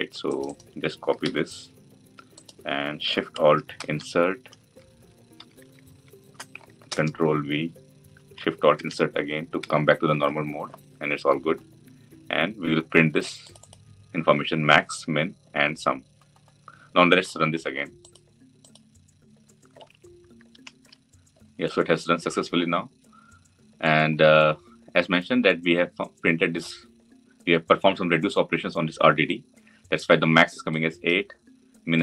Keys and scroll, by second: 1.0 ctrl+c, 3.5 alt+shift+Insert, 6.6 ctrl+v, 8.5 alt+shift+Insert.